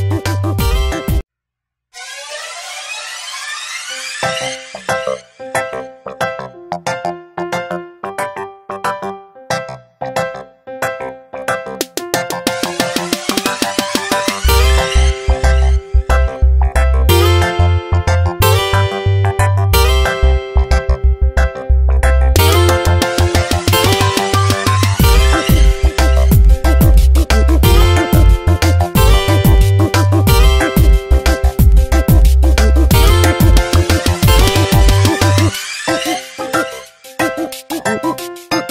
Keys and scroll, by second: 1.0 space, 1.5 Tab, 9.9 alt+BackSpace, 11.3 ctrl+z, 12.7 ctrl+BackSpace, 13.6 alt+BackSpace, 15.5 b, 17.5 x, 19.1 0, 27.3 x, 34.9 ctrl+h, 35.3 Tab, 36.4 v.